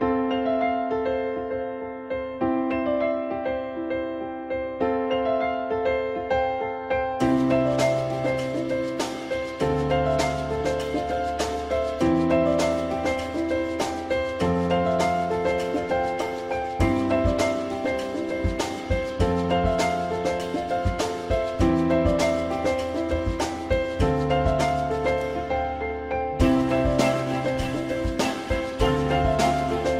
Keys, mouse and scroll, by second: 2.6 alt+middle click, 3.7 alt+middle click, 5.2 alt+middle click, 6.2 f, 24.4 click, 28.7 ctrl+s.